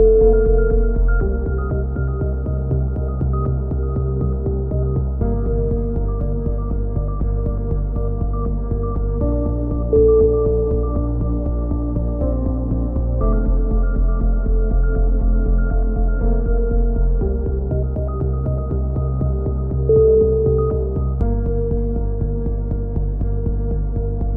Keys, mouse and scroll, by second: 0.6 click, 1.3 z, 2.0 click, 2.3 z, 4.3 click, 5.9 click, 6.3 click, 6.8-13.5 middle drag, 11.7 z, 12.4 a, 13.7-15.9 middle drag, 15.9 ctrl+r, 17.1 z, 18.6 b, 19.6-21.0 drag, 20.1 x, 21.1 a, 21.3 z, 21.6-22.7 drag, 22.5 k.